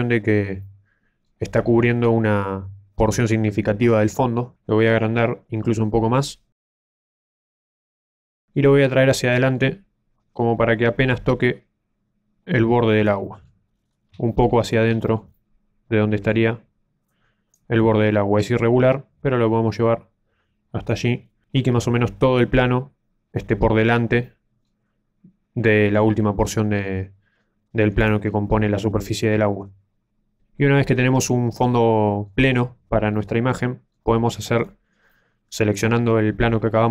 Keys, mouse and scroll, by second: 0.6 middle click, 1.7 z, 1.9-2.4 scroll down 3, 4.1 s, 7.3-8.2 scroll down 1, 8.6 middle click, 10.5 click, 13.2 middle click, 13.7 scroll up 3, 13.9 scroll down 1, 14.2 shift+middle click, 14.6-15.0 scroll up 3, 15.0 shift+middle click, 15.3 middle click, 17.0 click, 18.2 click, 21.2-21.6 scroll down 2, 21.5 middle click, 24.2 middle click, 28.0 right click, 30.9-31.4 scroll down 1, 31.4 middle click, 31.4 scroll down 1, 34.6 right click, 35.0 middle click.